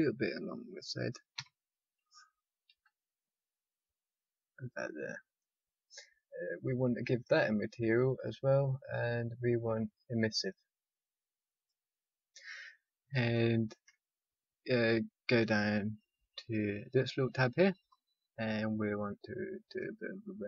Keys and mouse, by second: 1.3 r, 7.3-11.3 drag, 12.1-13.3 drag, 15.4 click, 16.5 click, 17.7 click, 19.6 click.